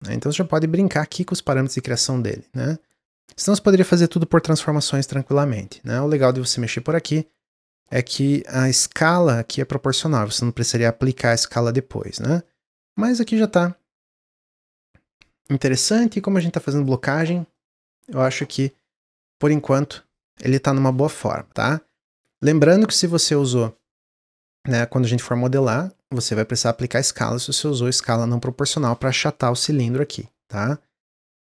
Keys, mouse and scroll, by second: 0.8-4.0 drag, 6.9-8.6 middle drag, 8.6 click, 9.0 scroll down 1, 11.4-14.2 middle drag, 14.2-17.3 drag, 19.4 click, 20.2-21.5 middle drag, 21.5 click, 21.8 click, 28.6-31.0 drag, 31.3-31.4 middle drag.